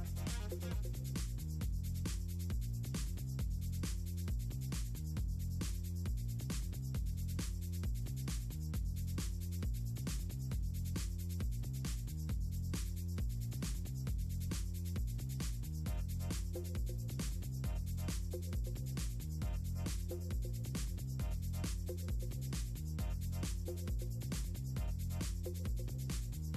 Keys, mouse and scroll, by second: 0.5 scroll down 2, 1.2 scroll down 2, 2.2-2.5 scroll down 2, 3.1 scroll down 2, 4.9 right click, 5.0 click, 5.1 scroll down 2, 6.5 right click, 8.7 click, 9.4 click, 9.8 click, 10.2 click, 11.6 click, 12.1 click, 13.4 click, 13.7 click, 14.3-15.2 typing, 15.3-15.9 scroll down 4, 16.1 click, 17.2-19.1 scroll down 12, 19.3-20.2 scroll up 6, 21.1 click, 21.5 scroll down 2, 22.2 scroll up 2, 22.5-23.4 scroll down 6, 24.9 click, 26.1 scroll down 2.